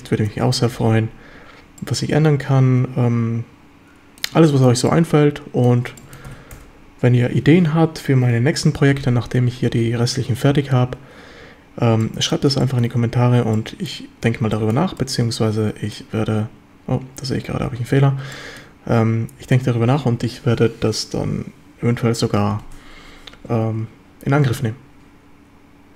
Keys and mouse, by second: 0.3 KP_7, 1.8-4.2 middle drag, 4.5 shift+middle click, 4.9-5.7 middle drag, 6.0-6.5 ctrl+shift+middle drag, 6.3 ctrl+s, 12.0-12.4 drag, 12.6 shift+middle drag, 13.6-13.9 middle drag, 14.6 shift+middle click, 15.0-16.0 middle drag, 18.3-18.7 shift+middle drag.